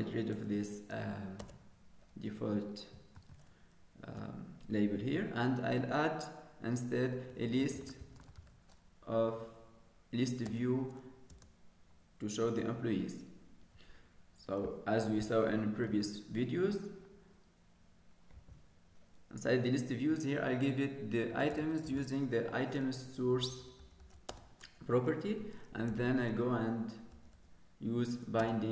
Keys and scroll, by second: 4.3 ctrl+s, 16.9 ctrl+s.